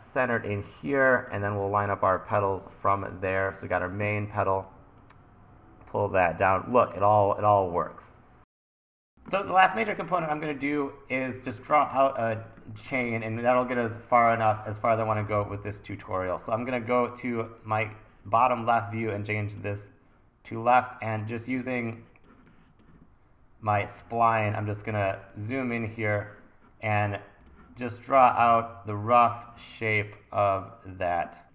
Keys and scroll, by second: 21.6 1, 24.0 1, 31.4 super+z.